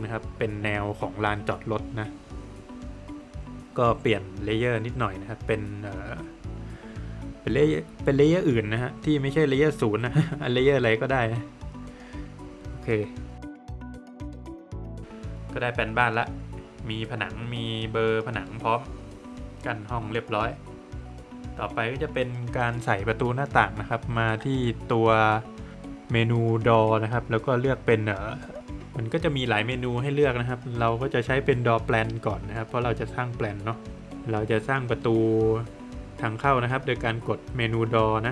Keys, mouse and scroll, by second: 1.0 click, 2.6 click, 6.5-7.8 scroll down 1, 12.0 click, 12.8 scroll down 1, 12.8 middle click, 13.4 scroll down 1, 13.4 middle click, 14.4 middle click, 22.8 click, 31.5 click, 37.1 click.